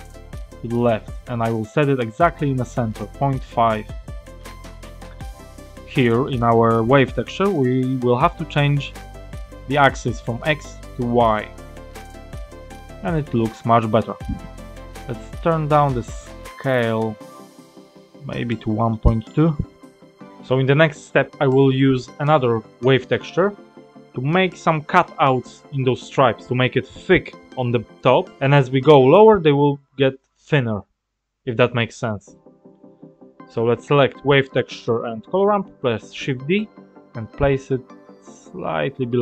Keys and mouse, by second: 0.0-0.4 drag, 0.7 click, 1.4-3.6 drag, 4.4 middle click, 6.3 click, 10.2-11.3 drag, 13.1-14.1 drag, 14.8 click, 15.8-18.9 drag, 21.3-24.5 drag, 26.6 click, 32.5-32.9 drag, 34.6 ctrl+z, 35.2 shift+d.